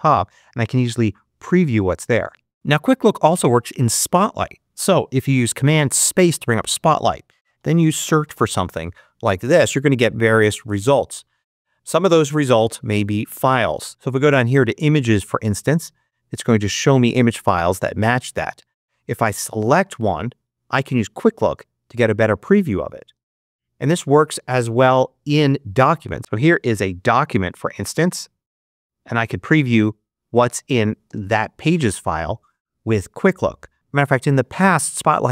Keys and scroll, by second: 7.3-8.9 typing, 21.4 space, 23.0 space, 28.4 space, 31.0 space.